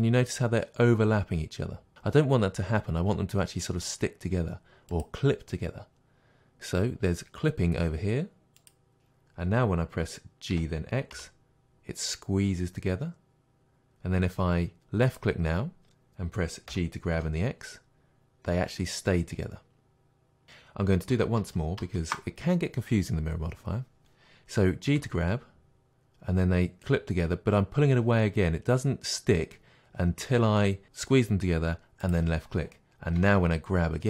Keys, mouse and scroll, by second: 5.0 click, 8.6 click, 10.5 g, 15.2 click, 16.7 g, 20.4 click, 21.4 ctrl+z, 25.0 g, 32.1 click, 33.2 g.